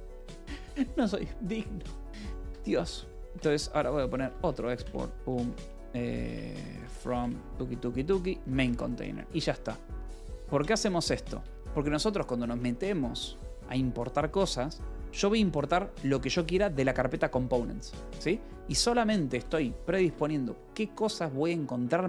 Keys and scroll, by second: 0.5 Return, 2.0-7.3 typing, 8.1 Return, 8.4 Escape, 9.0 =, 11.3 Return, 13.0 shift+v, 13.2 Escape, 15.0 :, 16.4-17.3 typing, 18.3 Escape, 18.9-19.8 typing, 19.9 Escape, 20.8 Return.